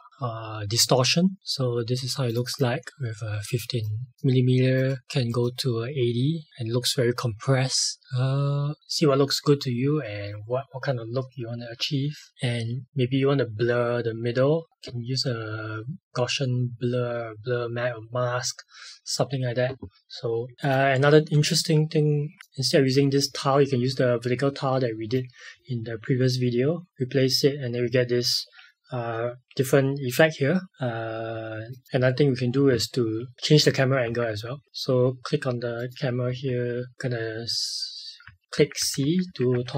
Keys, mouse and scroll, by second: 2.2 click, 12.3 click, 20.5 click, 30.7 click, 34.0 c, 35.7 click, 36.2 c.